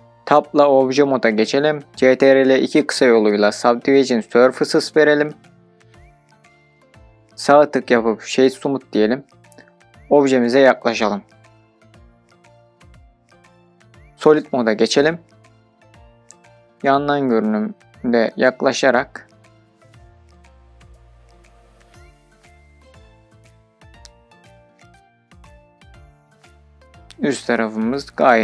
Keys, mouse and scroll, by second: 3.5 ctrl+2, 5.7-6.4 drag, 8.0 right click, 10.4-11.0 scroll up 2, 11.1-11.5 shift+middle drag, 11.8-12.2 scroll up 3, 12.2-12.6 shift+middle drag, 12.8-13.2 scroll up 2, 14.1-14.6 scroll up 2, 14.6 click, 15.1-15.5 middle drag, 18.1 click, 18.7 scroll down 2, 19.5 scroll down 3, 20.0 shift+scroll up 2, 20.2 shift+middle click, 20.8-22.1 shift+scroll up 7, 22.3 scroll up 2, 22.5-22.9 shift+middle drag, 23.1-25.0 scroll up 7, 23.9-24.2 shift+middle drag, 25.1-25.5 shift+middle drag, 25.8 scroll up 1, 25.9-28.0 middle drag, 28.0-28.4 scroll down 2.